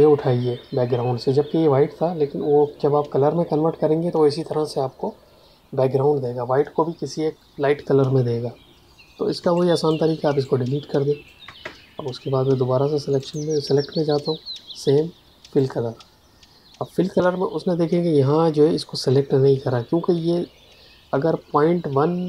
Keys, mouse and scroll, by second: 9.3 space, 9.5 click, 9.8 space, 10.3 click, 13.1 click.